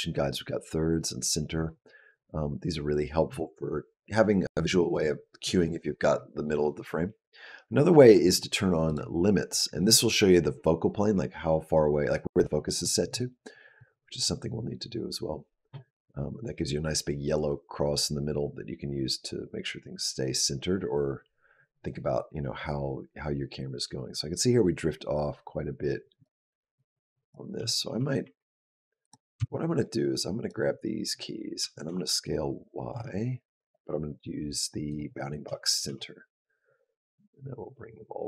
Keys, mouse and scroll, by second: 7.5-8.7 scroll up 2, 8.7 click, 13.6 click, 26.6 click, 27.4 g, 28.8 click, 29.2 b, 31.4 s, 33.4 click, 35.3 s.